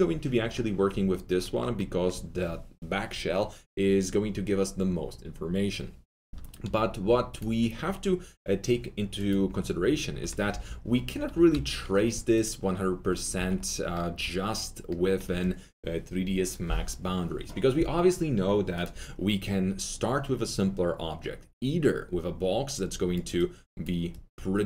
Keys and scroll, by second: 10.4 F3, 11.3 g, 13.3 alt+w.